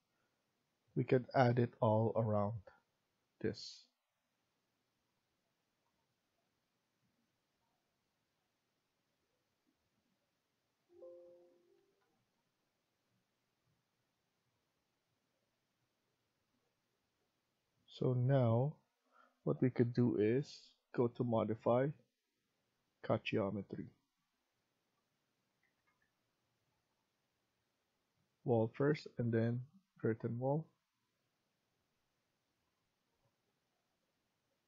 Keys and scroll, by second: 0.4 Escape, 11.4 Escape, 11.6 Escape, 25.5 Escape, 25.8 Escape, 30.3 Escape.